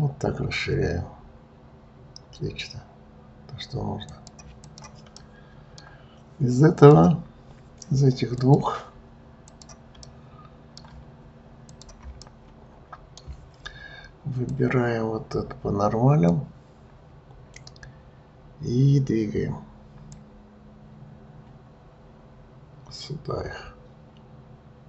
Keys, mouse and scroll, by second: 4.6 click, 5.1-6.7 middle drag, 6.7 click, 8.4-9.5 drag, 10.0-11.7 middle drag, 11.7 shift+click, 12.2-14.4 middle drag, 14.4-17.5 drag, 20.0 click.